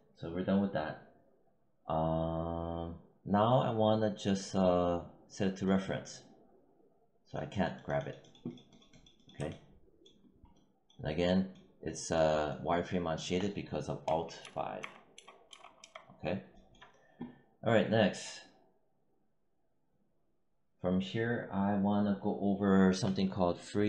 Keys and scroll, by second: 13.9 alt+5.